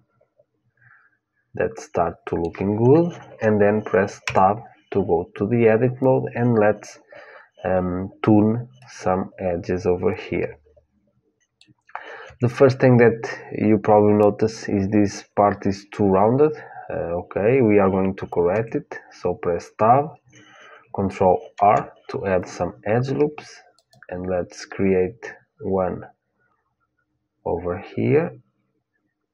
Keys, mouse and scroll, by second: 4.1 Tab, 8.5-10.6 middle drag, 12.0 Tab, 18.3 Tab, 21.2 ctrl+r.